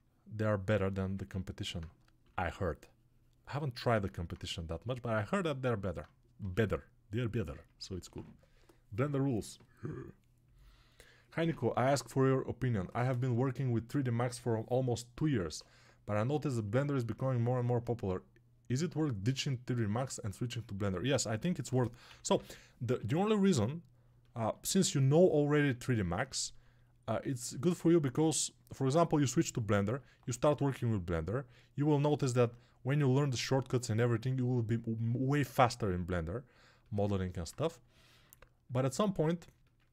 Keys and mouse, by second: 2.1 6, 6.3 g, 21.5 g, 22.0 ], 30.0-35.1 ctrl+alt+right drag, 35.1-39.9 alt+drag.